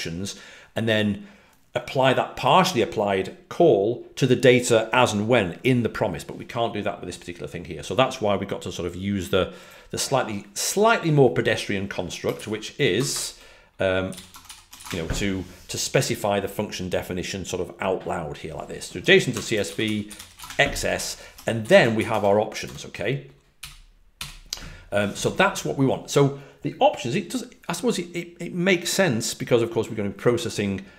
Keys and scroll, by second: 12.3-14.9 typing, 19.8-20.6 typing, 22.6-24.6 typing.